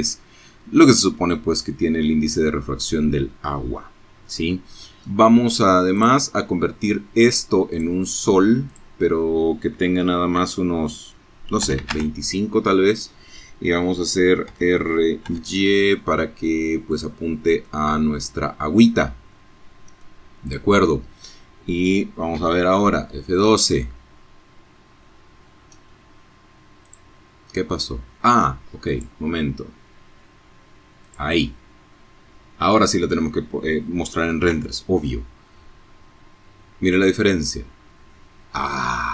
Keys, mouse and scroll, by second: 2.2 click, 3.9 click, 5.7 click, 6.6 click, 6.9-10.0 right drag, 9.6 KP_2, 9.7 KP_5, 9.9 KP_Enter, 12.4 r, 13.2 y, 14.8 click, 15.6-18.1 drag, 18.4 click, 20.4 F12, 23.2-23.6 scroll down 2, 23.7 scroll up 2, 24.8 click, 25.1 right click, 26.8 right click, 29.0 right click, 32.4 F12, 36.2 scroll down 2.